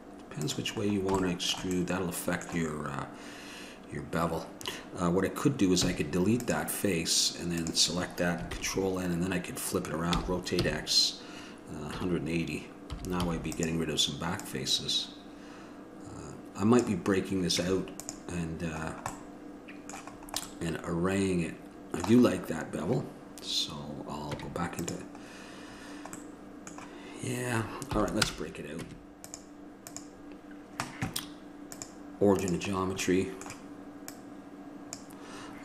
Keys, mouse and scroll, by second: 1.0-6.4 middle drag, 7.8-10.3 drag, 8.7 ctrl+l, 10.3 r, 17.8 Tab, 21.4 middle click, 22.5-24.5 middle drag, 24.5 Tab, 29.0 Tab, 32.9-35.1 middle drag.